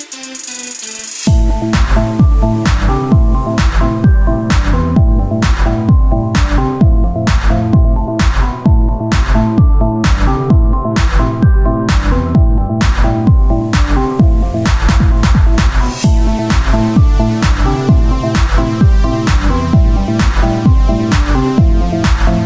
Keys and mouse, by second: 8.1 z, 9.6-11.3 drag, 11.3 e, 13.2-15.2 drag, 14.1 e, 16.1-17.4 drag, 17.4 KP_3, 22.2 z.